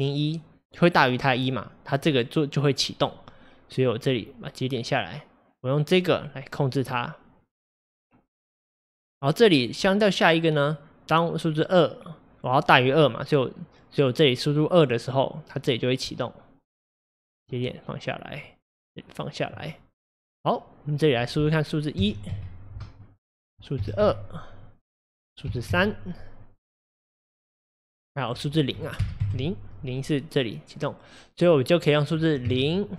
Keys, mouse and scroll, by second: 6.0-17.4 drag, 19.5 click, 21.7-32.9 drag.